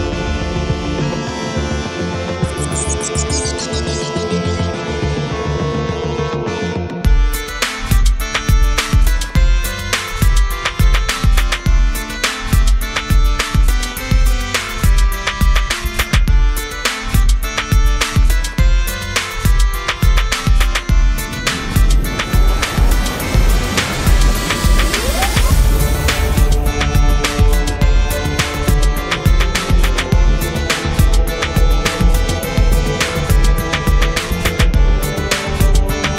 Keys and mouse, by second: 1.3 click, 1.3 right click, 2.3 click, 2.3 right click, 2.8 middle click, 3.0 click, 4.0 click, 4.9-6.0 drag, 6.7 middle click, 7.2 click, 7.6 1, 7.8 1, 8.2 f, 8.8-11.0 drag, 10.9 right click, 11.0 middle click, 11.1 click, 11.1 right click, 11.9 middle click, 12.2 click, 12.2 right click, 12.8 middle click, 12.9 click, 12.9 right click, 13.5 click, 13.7 middle click, 13.7 right click, 14.3 click, 14.8 KP_Divide, 15.2 click, 15.6 middle click, 16.1 Tab, 16.2 a, 16.4 a, 16.8 click, 17.8 click, 18.7 click, 18.8 middle click, 19.1 r, 20.4 middle click, 20.6 Tab, 21.4 middle click, 22.8 1, 23.5 1, 24.2 click, 25.0 click, 26.1 click, 26.3 middle click, 26.3 right click, 26.7 middle click, 27.0 click, 27.0 right click, 27.5-29.5 drag, 28.4 middle click, 29.8 click, 30.4 click, 30.8 d, 30.9 f, 31.2 click, 32.2 right click, 32.7 click, 33.4 middle click, 33.5-36.1 drag, 35.0 right click.